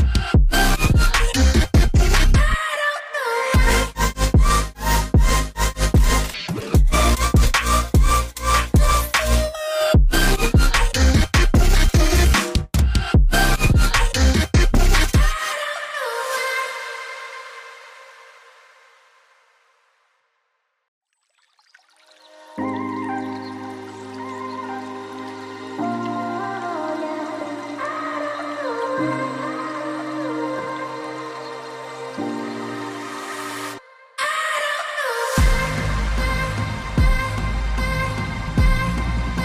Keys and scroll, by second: 6.7 8, 6.7 Tab, 12.2 6, 12.3 Tab, 12.5 6, 13.1 Tab, 13.5 1, 14.3 0, 14.4 Tab, 19.3 typing, 20.8 alt+Tab, 25.8-26.2 typing, 26.4 Tab, 28.7-29.5 typing.